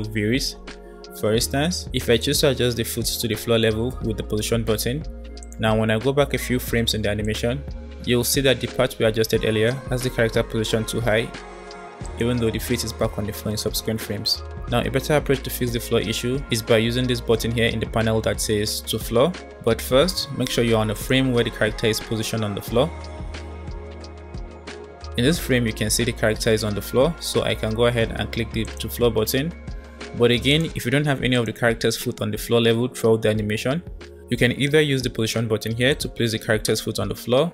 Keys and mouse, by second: 2.3-5.5 shift+drag, 7.3-9.0 drag, 12.0-13.3 drag, 20.9-25.2 drag, 25.2-28.7 middle drag, 28.7 click, 30.1-31.2 middle drag, 31.2-33.4 drag, 33.4-35.8 middle drag, 35.8-37.5 drag.